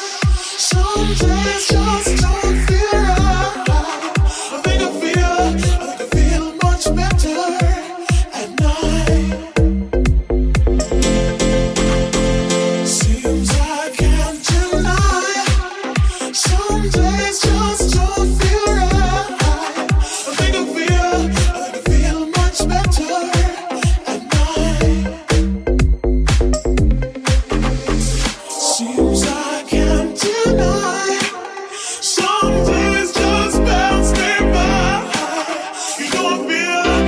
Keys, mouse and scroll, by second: 0.7-9.7 shift+middle drag, 9.7 right click, 9.7-10.8 middle drag, 10.5 Tab, 10.8 right click, 10.9-12.3 middle drag, 11.9 ctrl+a, 12.3 Tab, 12.6 right click, 13.2 l, 13.4 p, 14.1 Tab, 14.4 right click, 15.0 g, 16.3 ctrl+a, 17.7 w, 18.1 g, 18.7 g, 18.7 middle click, 19.6 middle click, 19.6 shift+g, 19.9-25.6 ctrl+shift+middle drag, 20.9 g, 21.7 r, 23.7 g, 26.0-27.1 middle drag, 27.1 right click, 27.2 middle click, 28.5 ctrl+middle click, 30.8-34.4 ctrl+middle drag, 33.1 click, 33.6 shift+r, 35.2 r, 35.3-36.8 ctrl+middle drag, 35.3 g, 36.2 g.